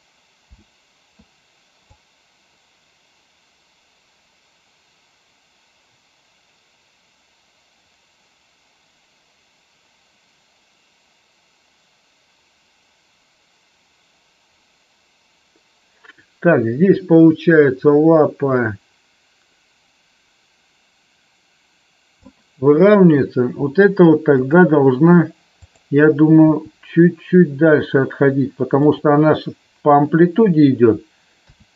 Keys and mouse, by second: 0.5 space, 1.9-22.3 drag, 24.3 click, 26.4 g, 31.4 a.